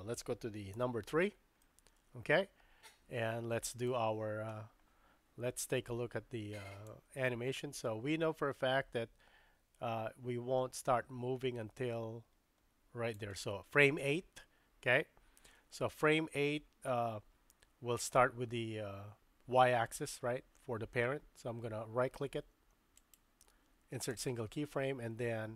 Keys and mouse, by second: 0.7 KP_3, 1.6-3.9 shift+middle drag, 6.9-13.2 drag, 23.0-24.2 right drag.